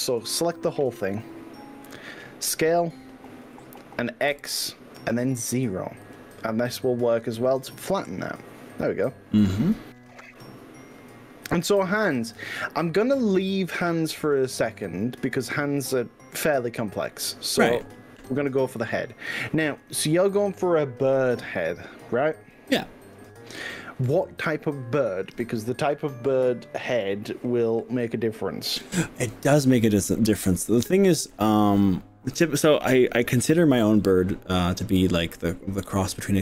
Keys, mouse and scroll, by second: 0.7 click, 3.5 s, 4.3 y, 5.5 x, 6.1 0, 7.7 click, 12.1 g, 13.3 click, 14.4-24.3 middle drag, 30.1-31.7 middle drag.